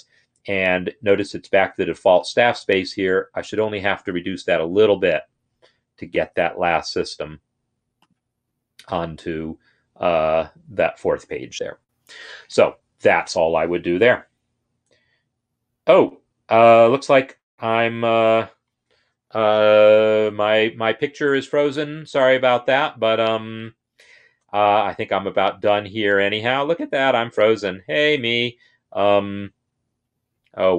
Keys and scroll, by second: 2.9 Right, 4.2 BackSpace.